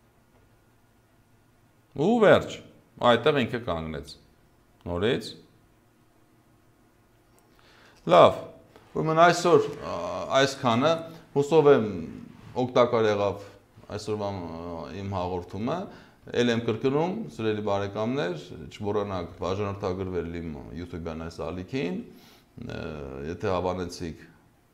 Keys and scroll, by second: 8.0 space.